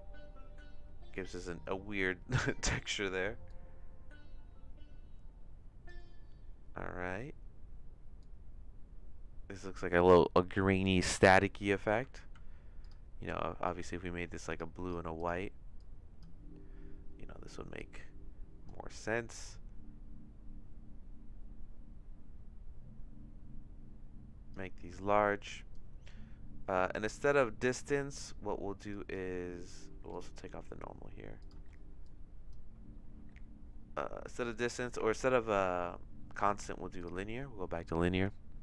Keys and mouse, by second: 2.9 middle click, 3.5-5.9 drag, 8.2-12.0 drag, 12.3 ctrl+z, 14.5 click, 14.8 click, 17.8 click, 19.5-24.5 drag, 25.4 click, 27.2 click, 28.9 click, 30.2 click, 31.4 click, 31.6 x, 32.1 click, 34.6-37.2 drag.